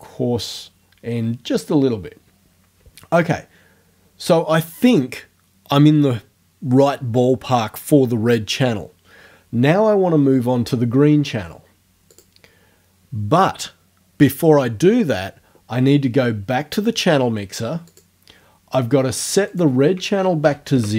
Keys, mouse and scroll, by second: 12.1 click, 17.9 click, 19.5 right click, 20.5 KP_0, 20.7 KP_Enter.